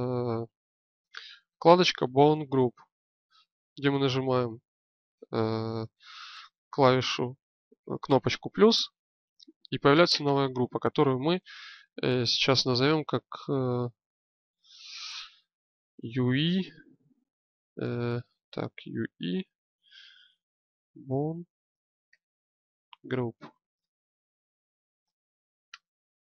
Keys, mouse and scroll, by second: 3.5-17.9 drag, 17.9 BackSpace, 18.0 BackSpace.